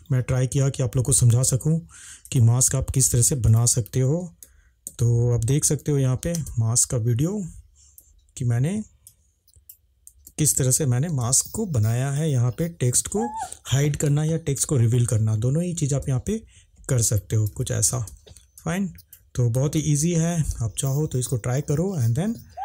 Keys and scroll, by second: 0.2 Escape, 1.4 space, 4.9 ctrl+s, 5.7 ctrl+`, 8.1 Escape, 8.8 space, 10.3 ctrl+`, 16.1 space, 17.5 Escape, 17.9 space, 19.8 ctrl+`.